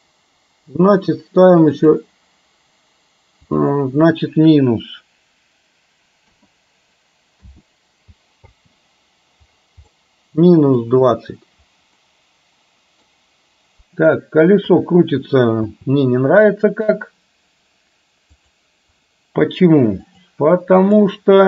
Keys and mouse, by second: 8.6 space, 9.9-10.8 middle drag, 12.1-13.1 middle drag, 14.8 KP_3, 15.7 space, 18.6-20.2 drag, 20.9 click.